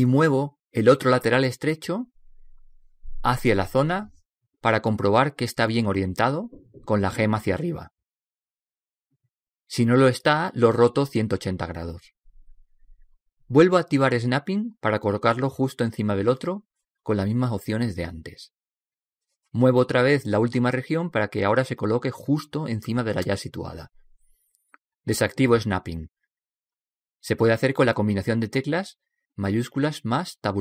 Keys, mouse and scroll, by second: 1.3 right click, 2.2 g, 4.6-6.5 middle drag, 6.6 middle click, 7.0 g, 15.8 click, 17.8 g, 26.0 click.